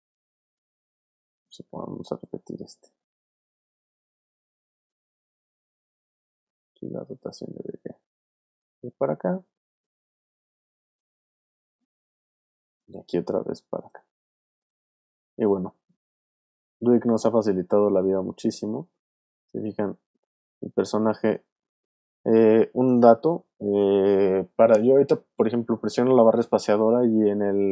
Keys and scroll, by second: 2.9 super+c, 3.1 super+v, 8.1 w, 14.4 super+c, 14.6 super+v, 20.7 alt+space, 21.5 space.